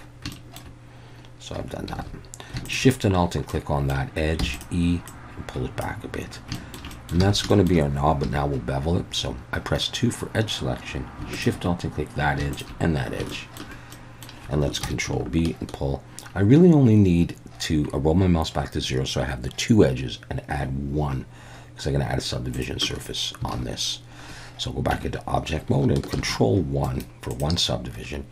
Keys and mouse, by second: 0.3 shift+middle click, 2.0 alt+a, 2.7 alt+shift+click, 3.5 middle click, 4.4 e, 4.6 click, 5.1 click, 6.6 shift+middle click, 6.9 middle click, 7.2 alt+a, 7.5 shift+middle click, 8.2 2, 11.3 alt+shift+click, 13.3 shift+middle click, 13.9 middle click, 14.8 ctrl+b, 22.6 shift+click, 23.5 alt+a, 24.9 Tab, 26.2 ctrl+1, 26.9 right click.